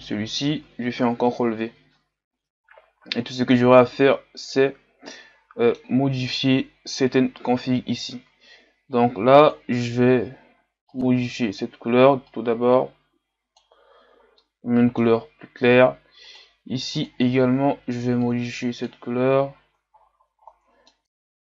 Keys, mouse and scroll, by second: 0.4 Delete, 1.7 ctrl+v, 4.1-5.1 scroll up 7, 5.1-5.7 scroll up 1, 5.7 scroll up 1, 9.5 click, 12.3 click, 14.6-16.4 middle drag, 16.4-18.3 drag, 19.9-20.8 ctrl+scroll up 10, 20.8 middle click, 21.0 ctrl+z.